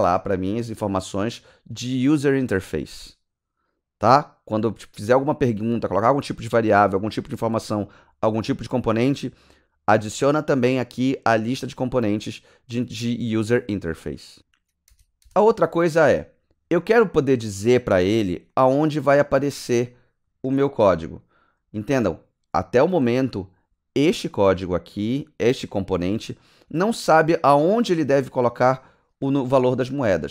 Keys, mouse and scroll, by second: 14.4 click, 14.8 KP_Enter, 27.8 click, 28.9 click, 29.5 click.